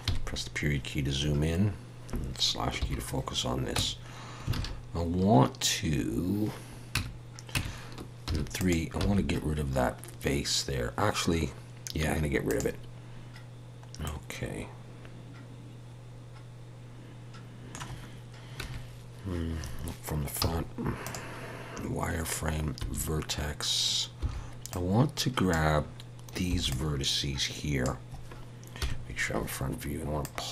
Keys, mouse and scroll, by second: 0.0 KP_Decimal, 1.3-1.8 scroll up 1, 2.8 /, 3.8 Tab, 4.5 alt+a, 5.6 scroll up 1, 6.9 Tab, 7.5 Tab, 8.3 3, 8.6 click, 9.0 x, 14.0 middle click, 18.6 KP_1, 20.4 z, 22.8 1, 24.2 b, 28.8 KP_1, 30.2 click.